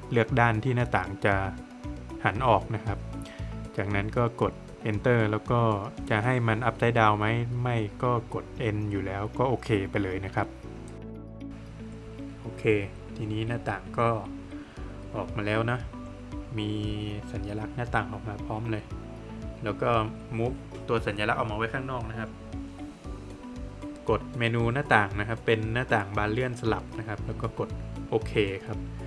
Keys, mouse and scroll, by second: 0.7 click, 1.9 scroll up 1, 11.2 Return, 13.1 scroll down 1, 15.0 space, 15.8 Escape, 16.2 click, 16.5-17.1 scroll up 1, 18.0 space, 18.6 click, 20.1-20.5 scroll down 1, 20.8 middle click, 21.1 Escape, 23.6 click, 27.0 click.